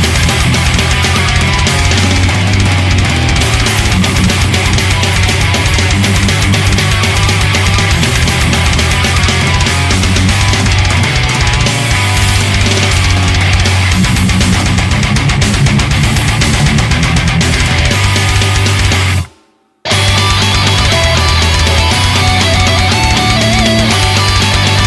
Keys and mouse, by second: 3.2 ctrl+z, 4.9 ctrl+z, 22.3 ctrl+z, 23.7 ctrl+z.